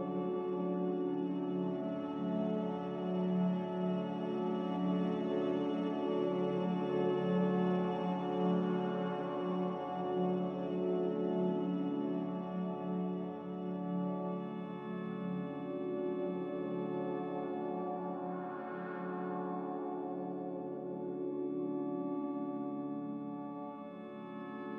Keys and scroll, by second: 17.6-18.4 typing, 20.9 q, 21.7 ctrl+j.